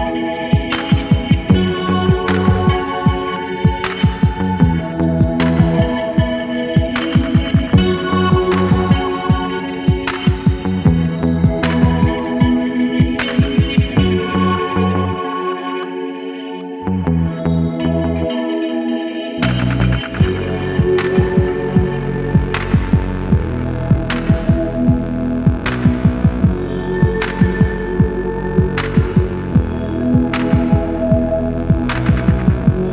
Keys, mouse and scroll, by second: 0.3-1.7 alt+drag, 2.1-4.0 alt+drag, 4.6-6.2 alt+drag, 6.6 scroll down 1, 7.1 scroll down 1, 8.4-11.0 drag, 11.2 alt+click, 11.6 scroll up 2, 11.9 alt+click, 12.4 shift+right click, 15.2-17.0 drag, 17.8-19.8 drag, 23.1-25.8 drag, 26.1 scroll down 2, 27.2-32.9 drag.